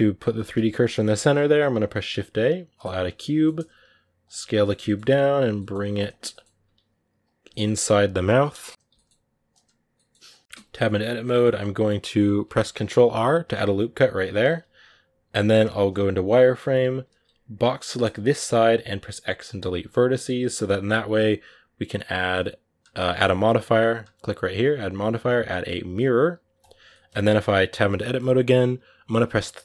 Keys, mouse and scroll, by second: 0.0 click, 0.2 shift+c, 2.7 shift+a, 2.9 middle click, 3.5 s, 4.3 middle click, 4.6 g, 5.3 g, 6.1 middle click, 6.4 s, 7.2 g, 8.6 KP_Decimal, 8.7 g, 9.6 s, 10.3 middle click, 10.4 Tab, 10.6-13.3 middle drag, 13.3 ctrl+r, 15.8 z, 16.5 a, 18.0 b, 19.4 x, 19.9 Tab, 20.3 z, 26.4 click, 26.7 middle click, 27.1 Tab, 27.7-29.5 middle drag, 29.5 3.